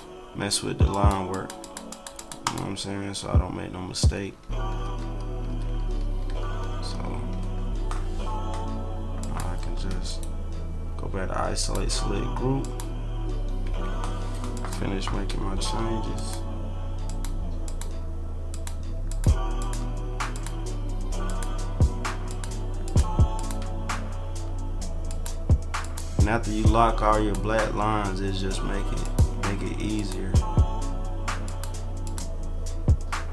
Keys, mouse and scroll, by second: 0.9 click, 1.3 click, 1.6 click, 1.9 click, 2.1 click, 2.4 click, 4.3 ctrl+=, 4.7-5.1 ctrl+scroll up 3, 5.1 middle click, 5.8 ctrl+-, 6.5 ctrl+-, 6.6 ctrl+middle click, 7.1 ctrl+=, 7.5 ctrl+=, 9.2 click, 10.1 right click, 11.6 click, 12.6 click, 13.7 Delete, 14.5 click, 16.1 shift+click, 17.0 shift+click, 17.6 shift+click, 18.5 shift+click, 19.1 shift+click, 19.6 shift+click, 20.3 shift+click, 21.2 shift+click, 22.2 shift+click, 22.8 shift+click, 23.3 shift+click, 25.0 shift+click, 25.8 shift+click, 27.1 shift+click, 29.0 shift+click, 29.9 shift+click, 31.4 shift+click, 32.0 shift+click.